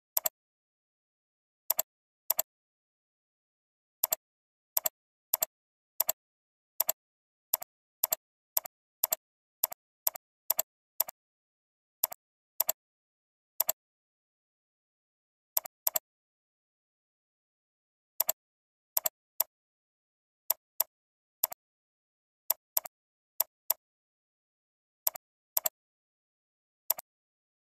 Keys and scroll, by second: 15.6 alt+space, 16.2 ctrl+h.